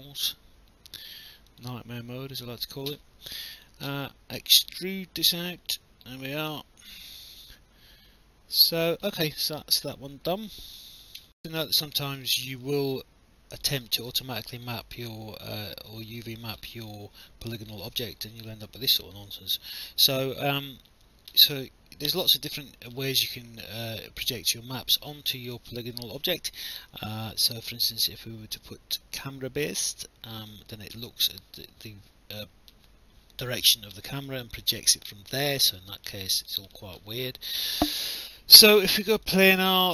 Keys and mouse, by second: 1.5 click, 3.5 click, 4.5 alt+click, 5.7 click, 6.6 alt+click, 9.2 alt+click, 11.2 alt+F9, 11.4 alt+click, 12.2 alt+middle click, 12.7 alt+click, 13.8 alt+middle click, 14.3 alt+click, 16.1 alt+click, 17.6 alt+click, 19.2 alt+click, 22.1 click, 30.4 click, 34.2 alt+click, 36.3 alt+click, 38.1 click.